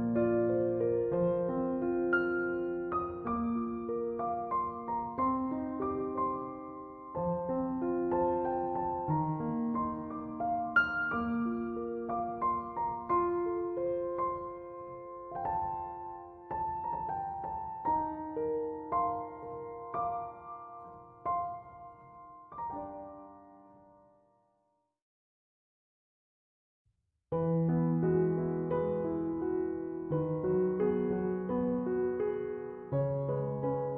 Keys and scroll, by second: 4.0 c, 4.1 o, 4.4 m, 19.5 ctrl+1.